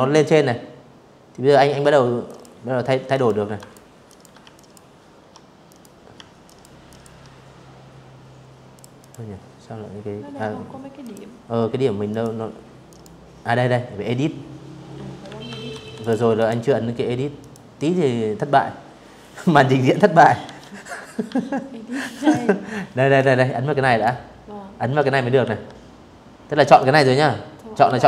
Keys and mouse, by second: 0.8 click, 1.2 ctrl+click, 1.7 ctrl+click, 2.2 alt+click, 3.3 click, 4.1 alt+click, 4.5 alt+click, 6.4 click, 6.6 click, 8.6 click, 9.8 click, 10.5 click, 12.9 Escape, 13.4 v, 13.7 click, 14.0 click, 15.1 click, 18.1 ctrl+1, 19.8 ctrl+click, 20.8 ctrl+click, 23.1 Escape, 24.4 click, 26.0 ctrl+1, 27.3 click.